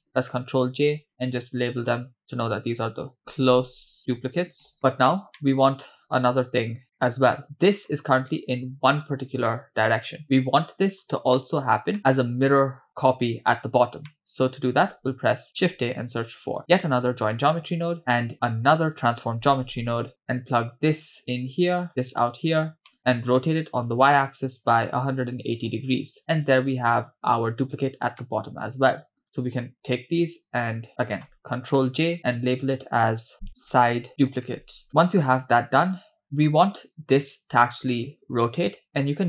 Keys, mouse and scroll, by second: 0.4 ctrl+j, 1.6-5.1 drag, 5.4 middle click, 6.0-6.8 scroll down 1, 6.8 scroll down 1, 7.0-7.9 middle drag, 11.4 middle click, 14.1 middle click, 15.5 shift+a, 18.3 shift+a, 20.9-21.2 drag, 21.9 click, 22.9 middle click, 23.7-25.7 drag, 26.6-28.2 scroll down 2, 28.2 middle click, 29.2-29.7 drag, 30.2 click, 31.8 ctrl+j, 32.3-34.9 drag, 34.9-35.5 scroll down 2, 35.6 click, 36.4-37.6 scroll up 2, 37.6 scroll up 1, 37.7-38.3 scroll down 2, 39.0 click.